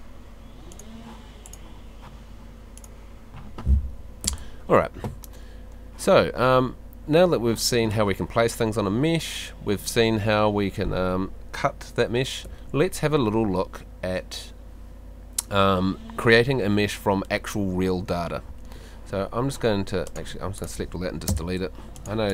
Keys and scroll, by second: 4.2 F2, 6.2 Escape, 12.5 Escape, 18.2 Escape, 21.3 BackSpace.